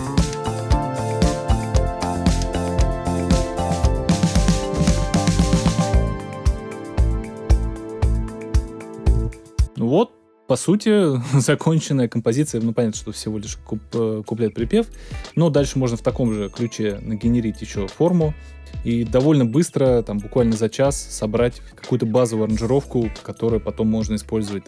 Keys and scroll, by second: 9.1 space.